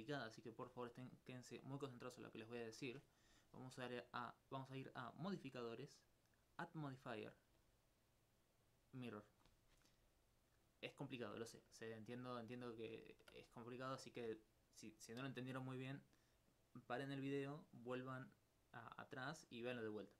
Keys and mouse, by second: 5.1-6.4 drag, 11.8 ctrl+alt+click.